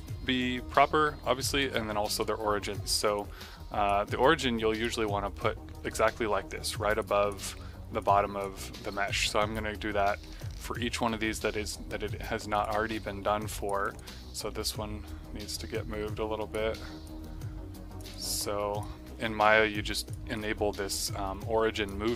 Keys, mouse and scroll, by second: 1.9 typing, 2.1 click, 3.1 click, 4.3 click, 6.9 click, 7.9 click, 9.0 click, 9.4 click, 12.4 click, 12.9 click, 13.7 right click, 14.0 click, 14.4 d, 15.4 click, 18.0 click, 19.4 click, 20.3 click.